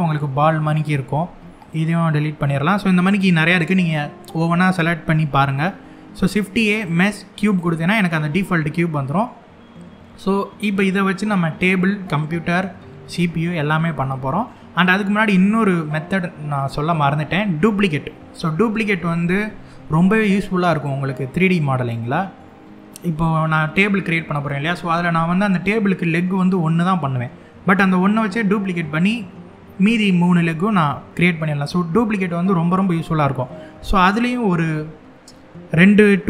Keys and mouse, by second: 0.9 x, 5.2 shift+a, 8.1-8.9 middle drag, 13.6-14.1 middle drag, 21.7-22.6 middle drag, 31.3-31.9 middle drag, 32.6 middle click.